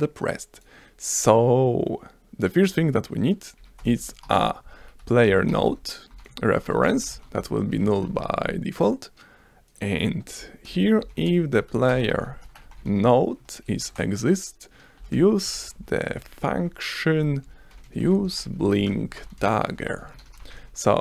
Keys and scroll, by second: 3.6 Up, 3.7-8.5 typing, 9.7 s, 10.7 Return, 10.8-13.4 typing, 13.9 Return, 14.7-20.5 typing, 17.1 Return.